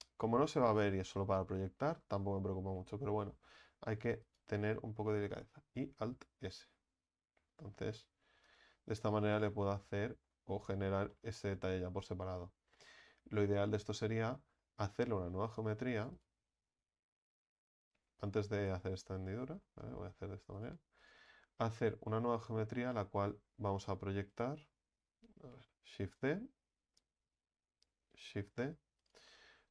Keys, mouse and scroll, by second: 1.9-4.0 shift+middle drag, 4.0 e, 5.8 alt+s, 8.7 Tab, 9.0-9.4 scroll down 4, 9.4-14.9 middle drag, 14.9 Tab, 15.5 right click, 16.0 alt+shift+right click, 16.2 alt+shift+right click, 16.7-18.1 scroll up 3, 18.1 ctrl+z, 18.3 ctrl+z, 18.6 ctrl+z, 18.8 ctrl+z, 18.9 ctrl+z, 19.1 ctrl+z, 19.4 ctrl+z, 19.5 ctrl+z, 20.6 right click, 21.0 alt+shift+right click, 21.2 alt+shift+right click, 21.6-22.0 scroll down 2, 22.0-24.3 scroll up 2, 24.3 alt+shift+right click, 26.2 right click, 27.2 ctrl+z, 28.5 shift+d.